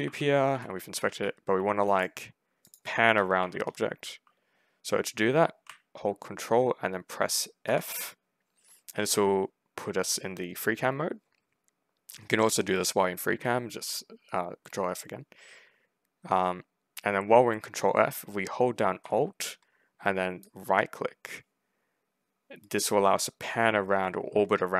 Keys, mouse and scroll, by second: 0.0-1.4 typing, 1.7 middle click, 2.5 click, 2.8 a, 3.3 1, 7.5 ctrl+f, 20.3-24.7 alt+right drag.